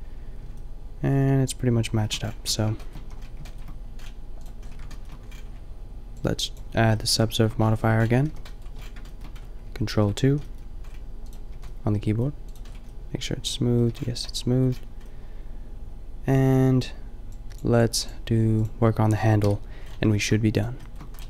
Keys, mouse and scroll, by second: 2.5 Tab, 3.1 a, 4.1-5.1 middle drag, 8.4 KP_5, 9.9 ctrl+2, 10.3 a, 11.3-13.4 drag, 11.5 a, 13.9 a, 14.8 middle drag, 19.4 KP_5, 20.6-21.2 middle drag.